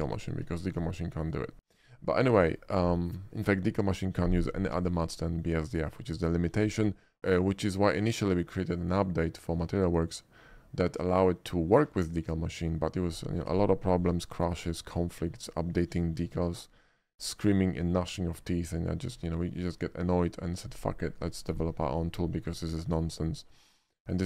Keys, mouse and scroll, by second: 0.7 shift+middle click, 1.1-1.7 shift+middle drag, 1.9 shift+middle click, 2.2 shift+middle click, 2.5 shift+middle click, 5.5 shift+middle click, 5.9 shift+middle click, 16.2-16.7 shift+middle drag, 17.1-17.9 shift+middle drag, 19.5 shift+middle click, 19.9 middle click, 22.7 middle click, 23.5 middle click, 23.9 shift+middle drag.